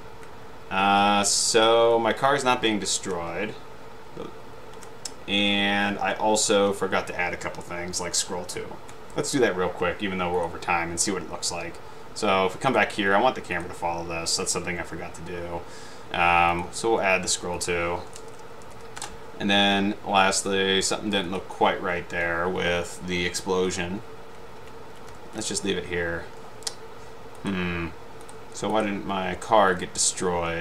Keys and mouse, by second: 1.5 Left, 2.0 Down, 2.6 Up, 2.9 Right, 3.4 Right, 5.0 Left, 5.6 Right, 6.7 Left, 10.5 click, 12.8 click, 13.6 click, 16.6 click, 17.7 click, 18.1-19.3 typing, 21.4 click, 24.0 Up, 24.0 Right, 24.8 Left, 25.2 Down, 25.2 Left, 25.3 Down, 27.5 click, 28.4 drag.